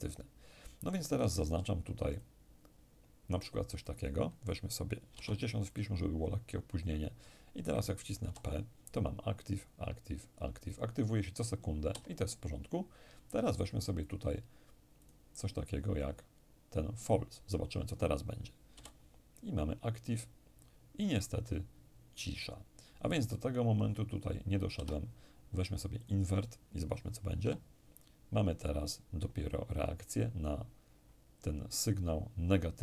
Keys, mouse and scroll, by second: 1.8 click, 3.5 click, 4.7 6, 5.3 click, 5.3 0, 7.9 p, 11.5 Escape, 13.7-15.7 drag, 18.3 p, 24.4 Escape, 25.6 click, 27.0 p, 32.7 Escape.